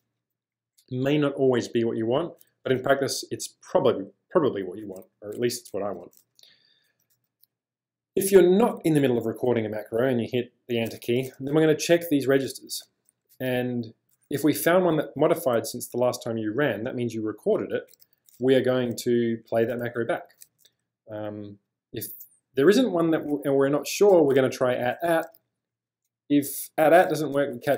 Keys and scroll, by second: 5.1-11.5 typing, 12.9-14.1 typing, 18.4 j, 20.4 j, 20.7 j, 20.8 j, 21.5 j, 25.2 j, 27.7 j.